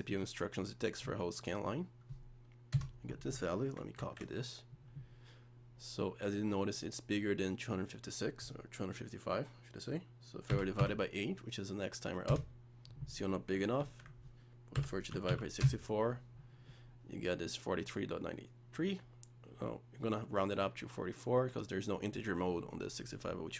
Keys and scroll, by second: 4.0 ctrl+c, 13.8 ctrl+v.